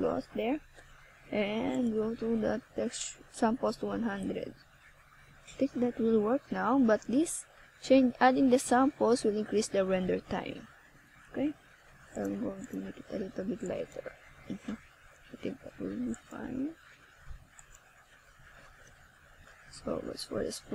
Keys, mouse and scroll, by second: 1.0 click, 14.0 KP_3, 15.9 click, 17.2 click, 17.8 click, 19.8 shift+a.